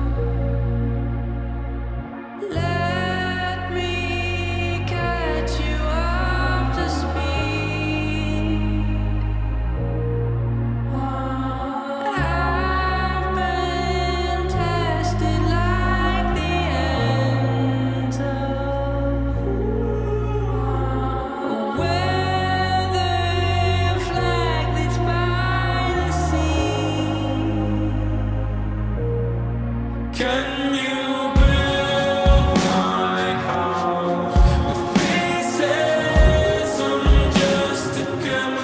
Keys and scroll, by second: 0.3 x, 4.5 f, 5.4 x, 5.9 alt+z, 8.2-14.5 typing, 15.6 x, 17.6 shift+d, 17.9 shift+d, 18.8 x, 19.5 space, 20.6 x, 21.2 x, 22.6 x, 23.8 s, 24.8 x, 27.8 5, 27.8 KP_0, 27.9 Return, 31.6 f.